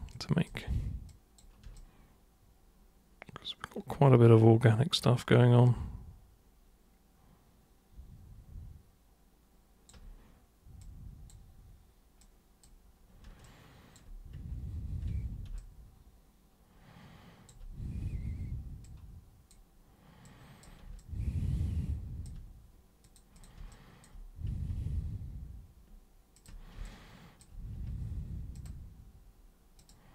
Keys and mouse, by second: 0.1 super+click, 1.1 super+click, 1.7-9.9 alt+super+drag, 10.8 super+click, 12.2 super+click, 13.4 alt+super+click, 15.5-17.5 alt+super+drag, 18.8 super+click, 20.2 super+click, 21.0-22.2 alt+super+drag, 23.0 super+click, 23.4 super+click, 23.7 alt+super+click, 26.3 ctrl+super+click, 26.8 alt+super+click, 28.5 ctrl+super+click, 29.8 super+click.